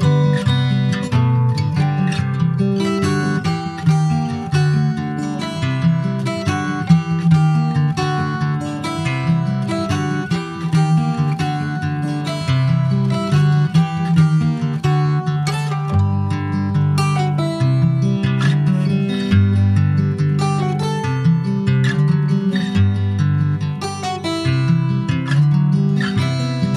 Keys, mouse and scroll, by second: 1.1 middle click, 1.4 ctrl+s, 1.5 click, 2.3 /, 2.7 scroll down 1, 3.1 click, 3.4 Tab, 3.7 click, 4.7 3, 4.8 click, 6.0 3, 6.1 click, 6.6 scroll up 1, 6.9 Tab, 7.2 click, 8.3 3, 8.5 click, 9.0 ctrl+s, 9.5 alt+middle click, 10.2-10.8 alt+scroll up 1, 12.4 i, 18.8 middle click, 19.2 scroll up 2, 19.4-20.4 shift+middle drag, 20.4 e, 23.3 click, 23.6 scroll down 2, 23.8 middle click, 24.5 ctrl+s, 24.6 ctrl+click, 24.8 middle click, 25.1 Tab, 25.2 click, 25.4-25.8 scroll down 3, 25.8 middle click, 26.1 ctrl+s, 26.2 ctrl+click, 26.7 ctrl+s.